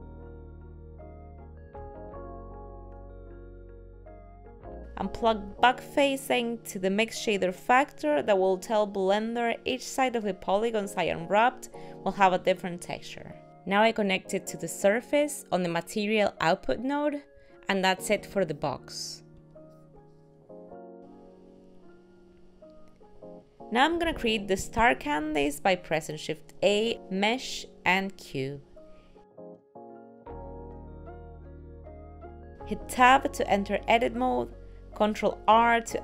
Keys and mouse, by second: 20.9 click, 21.4 middle click, 26.1 shift+middle click, 26.5 shift+a, 30.1 middle click, 30.9 g, 32.6 Tab, 32.6 click.